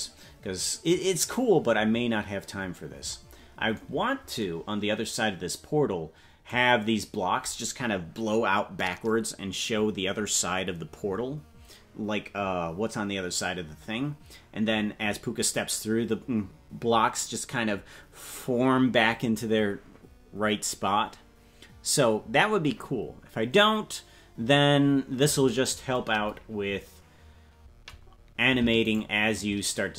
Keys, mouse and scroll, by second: 29.0 shift+right click.